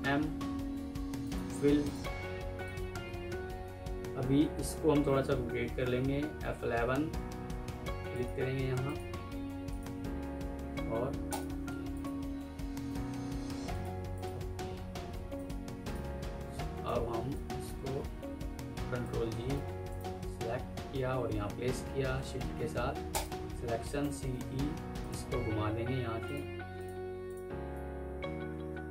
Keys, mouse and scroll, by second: 6.2 F11, 12.4 alt+e, 12.7 m, 14.0 double click, 14.8 Escape, 15.8 double click, 16.4 ctrl+u, 16.8 Escape, 17.2 alt+click, 18.2 ctrl+g, 19.4 right click, 23.0 shift+click, 23.9-24.2 typing, 24.6 Escape, 28.0 F3.